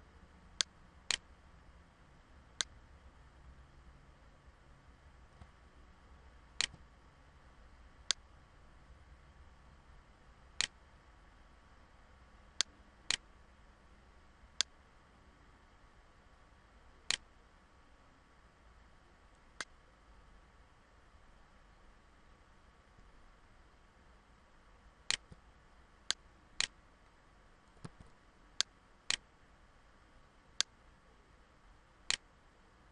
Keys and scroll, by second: 27.4 ctrl+z, 28.7 ctrl+z.